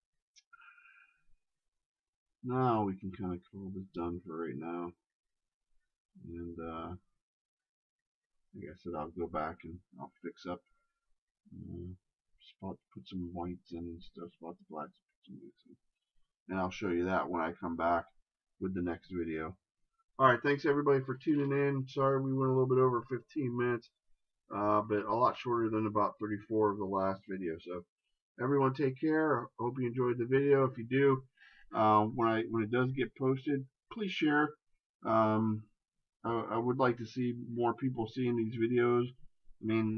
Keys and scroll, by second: 13.8 ctrl+z, 32.2 shift+space.